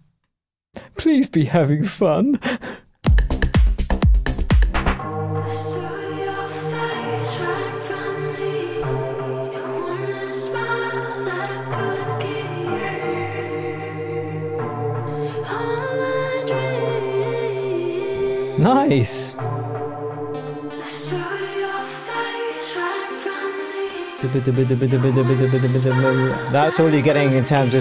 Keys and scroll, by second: 3.0 space.